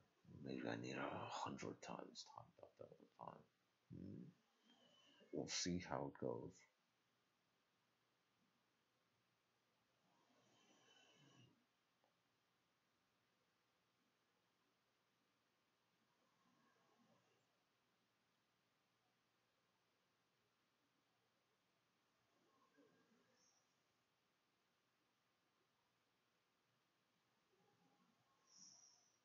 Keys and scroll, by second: 16.5-29.2 typing, 17.9 Return.